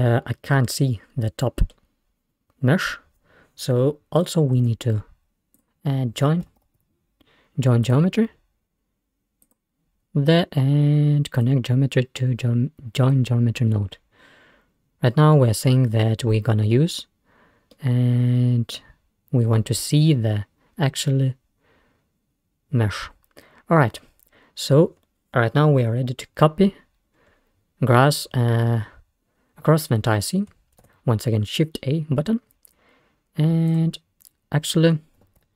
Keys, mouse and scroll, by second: 0.6-3.4 middle drag, 4.2 click, 4.7 shift+a, 11.5-14.3 drag, 14.3-14.7 scroll down 1, 17.8-20.5 middle drag, 27.1-28.2 scroll up 3, 28.2-30.5 scroll down 3, 31.4 shift+a, 33.5 click, 34.5 click.